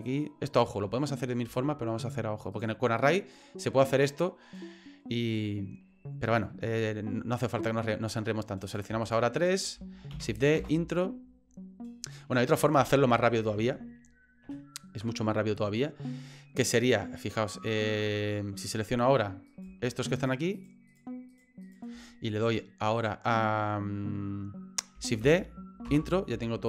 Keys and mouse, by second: 1.6 shift+middle click, 2.5 right click, 8.6 right click, 9.0 shift+right click, 9.4 shift+right click, 10.1 shift+d, 12.8 ctrl+z, 13.1 ctrl+z, 13.6 ctrl+z, 14.4 ctrl+z, 19.5 right click, 20.2 shift+right click, 20.5 shift+right click, 20.9 shift+right click, 21.3 shift+right click, 21.6 shift+click.